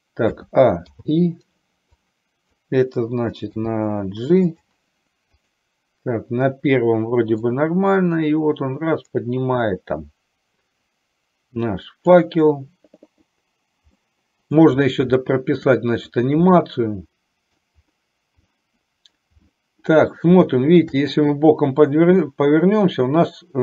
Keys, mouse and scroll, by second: 0.5 a, 1.1 i, 2.1 click, 3.6 g, 7.7-12.5 drag, 14.2 middle click, 15.3 shift+middle click, 16.6-17.7 middle drag, 18.6 middle click, 19.5 middle click, 20.5 shift+middle click, 21.1-22.3 middle drag.